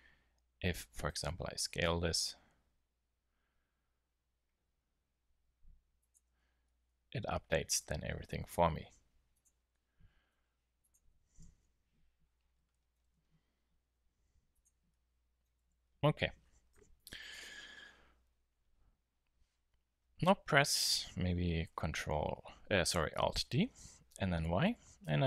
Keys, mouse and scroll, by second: 1.0 s, 2.0 s, 6.2 Tab, 6.4-6.8 middle drag, 8.0 Tab, 8.4 s, 10.4 s, 11.4 KP_1, 13.8 s, 15.7 Tab, 16.7 KP_7, 23.7 alt+d.